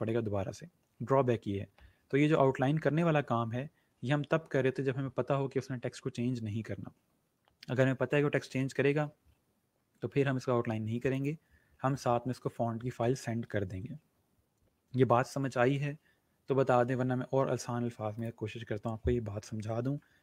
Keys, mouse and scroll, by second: 9.1 ctrl+z, 11.1 click, 18.5 click.